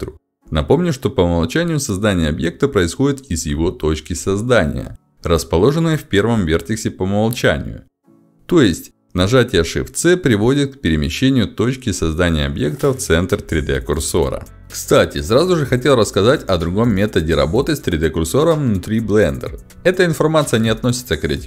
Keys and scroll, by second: 2.8 ctrl+shift+x, 3.7 space, 4.9 space.